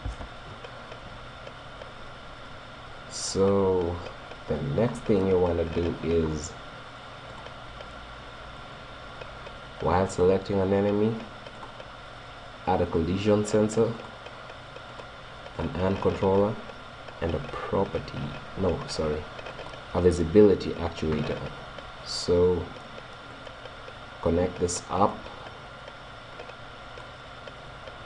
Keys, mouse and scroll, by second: 0.0 p, 4.1-5.2 right drag, 5.2 middle click, 5.8-7.4 scroll up 1, 7.4-8.7 drag, 8.7 right click, 13.1 click, 14.9-18.3 drag, 23.3-25.1 drag, 26.4-28.0 drag.